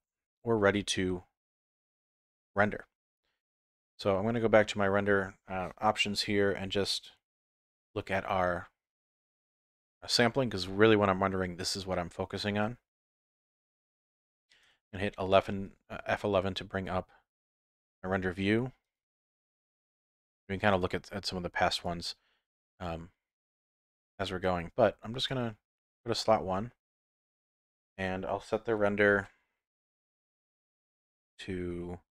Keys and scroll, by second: 15.2 F11.